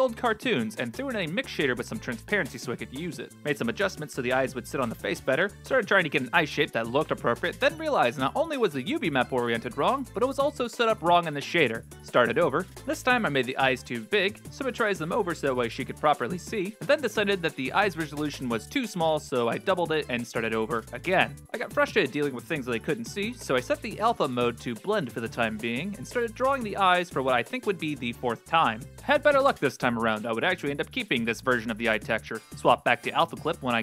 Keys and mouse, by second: 1.0-2.7 drag, 3.4 right click, 3.4 1, 3.9 g, 5.6 ctrl+space, 7.6 click, 8.9-10.1 drag, 11.8 click, 11.8 x, 14.9 middle click, 16.7-18.6 drag, 16.7 BackSpace, 19.5 alt+r, 21.7 click, 23.5-24.6 drag, 25.7 ctrl+space, 26.0 click, 26.5 x, 26.6 e, 26.6 click, 27.1 click, 27.4 click, 27.8 x, 27.8 click, 28.0 click, 28.2 x, 28.2 click, 28.2 x, 28.5 click, 28.6 click, 28.9 click, 29.6 click, 29.7 click, 29.8 ctrl+z, 29.8 click, 29.9 ctrl+z, 30.1 click, 30.7 click, 31.1 click, 32.1 click, 32.1 f, 32.5 ctrl+space, 32.6 click.